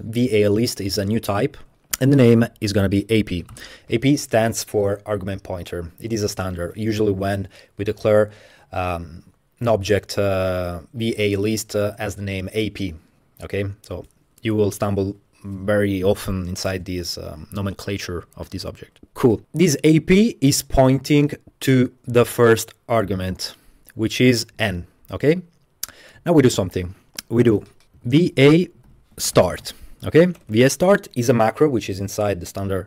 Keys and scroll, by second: 2.4-3.5 typing, 27.2 Return, 27.8-31.0 typing.